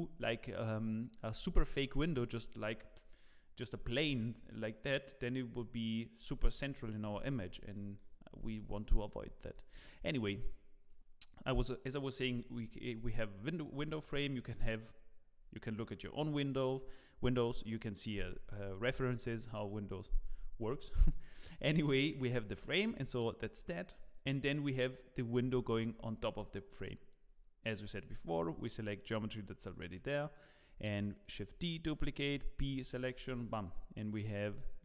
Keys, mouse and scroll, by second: 7.7 middle click, 8.1-8.5 scroll up 5, 8.5 shift+middle click, 8.9 middle click, 9.3 shift+middle click, 9.9-10.4 scroll up 2, 10.3 click, 18.4-18.8 scroll up 3, 18.8 shift+middle click, 20.5 scroll down 1, 20.9 shift+middle click, 21.4 scroll down 1, 21.5 middle click, 22.7 shift+middle click, 23.2-23.5 scroll down 3, 23.6 shift+middle click, 25.4 Tab, 25.6-26.0 scroll up 3, 26.0 shift+middle click, 29.4 scroll down 8, 29.7 middle click, 30.6-31.1 scroll up 3, 31.3 shift+d, 32.7 p, 33.1 Tab, 34.0 click, 34.5-34.8 scroll up 6, 34.6 middle click.